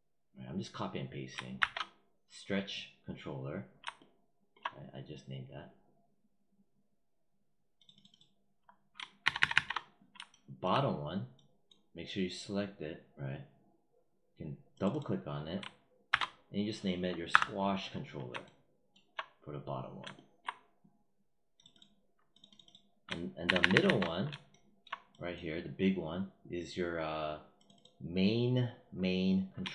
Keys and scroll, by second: 1.4 ctrl+v, 9.1 ctrl+c, 16.0 ctrl+v, 17.2 Return, 23.3 ctrl+c.